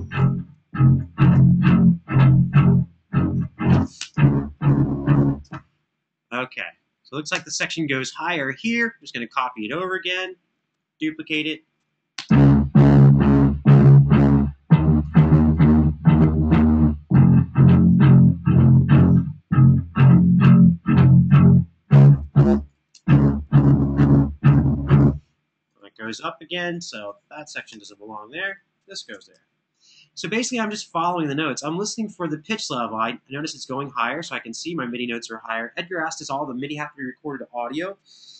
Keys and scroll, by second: 1.1 super+d, 3.7 space, 5.2 space, 7.0 BackSpace, 11.0 super+d, 11.9 space, 22.2 space, 22.7 space, 25.5 space, 27.4 BackSpace, 29.0 super+d.